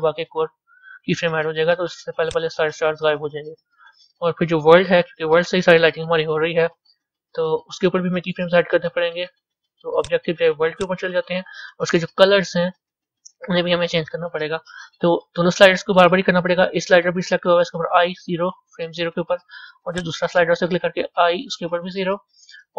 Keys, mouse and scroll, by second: 2.2-18.0 drag, 20.0-20.4 drag, 22.1 i.